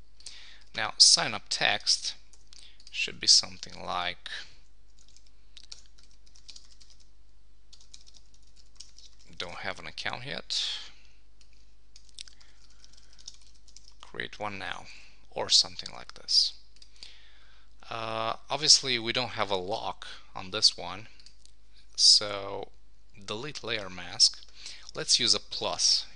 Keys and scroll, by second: 2.3 Escape, 3.4 Left, 3.7 shift+Down, 4.0 shift+Left, 6.5 shift+d, 9.5 shift+?, 12.2 shift+c, 13.7 super+Return, 15.0 super+s.